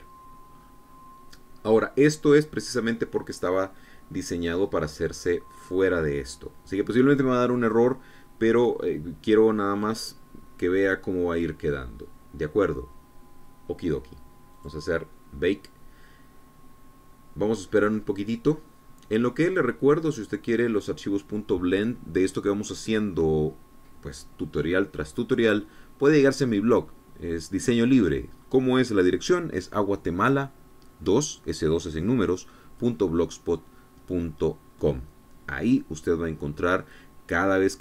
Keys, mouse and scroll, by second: 1.2-1.6 scroll up 1, 1.6 scroll down 1, 15.2 click.